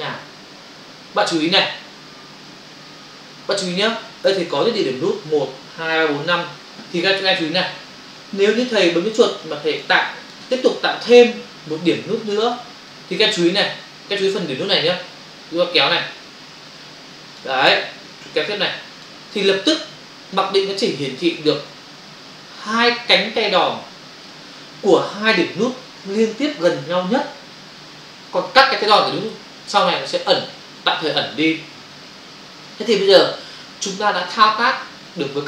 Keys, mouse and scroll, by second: 8.4 space, 9.4 ctrl+click, 10.0 click, 11.8 space, 15.8 click, 18.1 click.